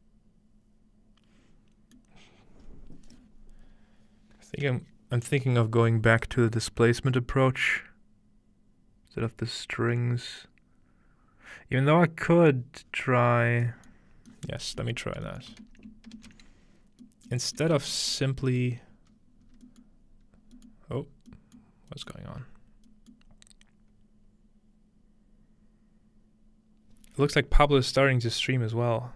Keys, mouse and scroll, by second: 2.1-5.4 middle drag, 12.7 middle click, 12.9-15.4 scroll down 2, 15.4 middle click, 19.4 ctrl+scroll, 19.5 scroll up 2, 19.9-24.9 ctrl+middle drag, 20.3 scroll up 1.